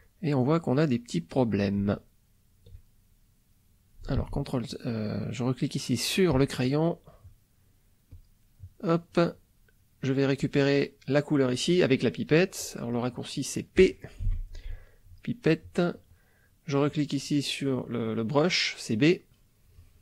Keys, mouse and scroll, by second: 0.1 middle click, 1.1 middle click, 2.0 ctrl+middle click, 3.2 middle click, 3.6 middle click, 4.2 ctrl+z, 6.3 click, 6.9 middle click, 8.1 click, 8.9 middle click, 12.6 click, 14.3 p, 15.0 click, 15.6 click.